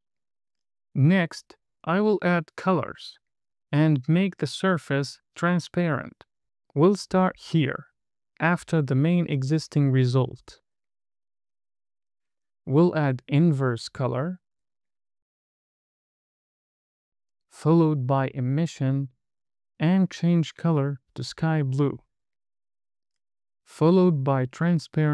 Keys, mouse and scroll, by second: 1.3 space, 2.7 click, 3.1 space, 6.4 space, 6.6-7.2 scroll down 4, 7.3 middle click, 8.3 middle click, 9.5 middle click, 10.5 click, 11.8-12.4 scroll up 3, 12.7 shift+a, 16.2 click, 17.2 shift+a, 21.0 click, 23.1 shift+a.